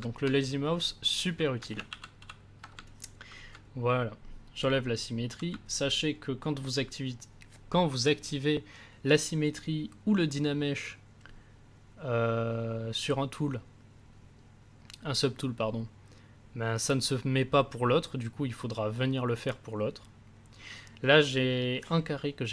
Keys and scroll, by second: 1.8 ctrl+z.